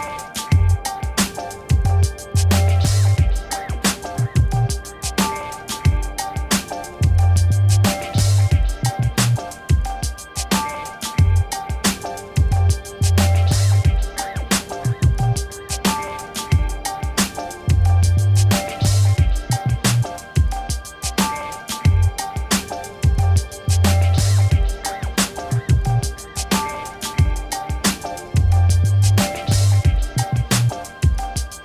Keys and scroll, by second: 2.5 d, 4.5 alt+BackSpace, 6.8 5, 6.9 0, 7.5 Return, 29.3 0, 31.1 0, 31.5 7.